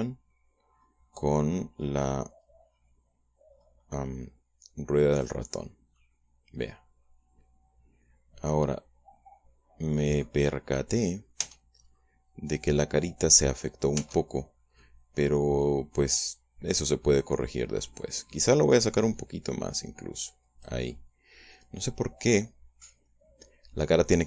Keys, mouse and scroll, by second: 0.5-1.6 scroll down 2, 1.6-2.2 scroll up 2, 2.8 scroll up 2, 3.3-3.9 scroll down 2, 4.3-4.8 scroll up 2, 6.3-6.7 scroll down 2, 6.7-11.2 middle drag, 11.3-11.7 scroll up 1, 11.8 scroll down 1, 12.2 Tab, 12.6-12.9 scroll up 1, 14.8 Tab, 15.6-19.9 middle drag, 19.9-21.7 drag, 21.7-24.2 middle drag.